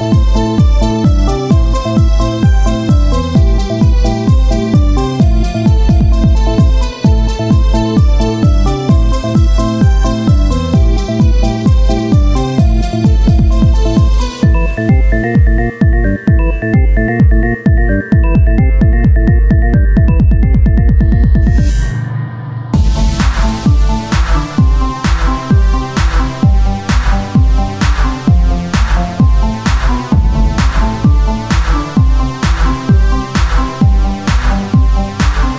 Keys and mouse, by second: 0.7 e, 4.1 click, 4.7 e, 8.3 Tab, 9.4 KP_1, 9.7 z, 12.3 ctrl+Tab, 14.0 ctrl+r, 16.0-17.3 drag, 17.3 ctrl+Tab, 18.9 KP_1, 19.4 ctrl+Tab, 21.5 c, 23.1-24.9 drag, 26.3-29.0 drag, 26.3 c, 29.0 z, 29.8 click, 29.9 Tab, 32.8 Tab, 33.7 z, 34.1 c, 34.8 z, 35.1 Tab, 35.4 Tab.